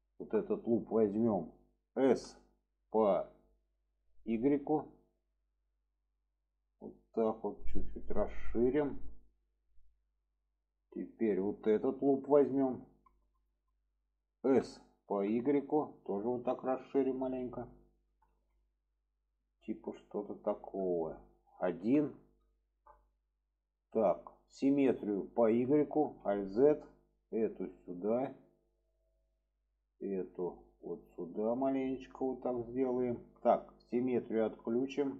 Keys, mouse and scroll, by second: 0.4 middle click, 8.3-8.9 middle drag, 9.1 shift+middle drag, 9.9-11.1 middle drag, 12.5-13.0 drag, 13.4 alt+shift+drag, 13.7 middle click, 14.4 s, 18.5-19.5 middle drag, 19.7 middle click, 20.8 middle click, 22.6 middle drag, 25.4 click, 25.9 alt+z, 26.5-27.0 drag, 27.9 click, 29.8-30.3 drag, 30.9 click, 33.0 shift+middle drag, 34.3 click, 34.7 shift+middle click.